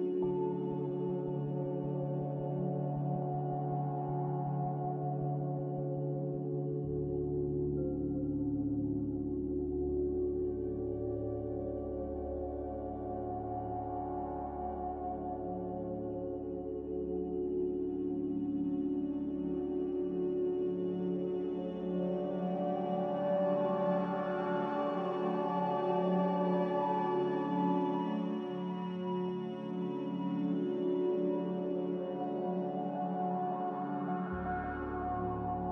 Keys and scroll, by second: 15.5 b, 16.9 Delete, 18.9 f, 19.9 a, 23.5 m.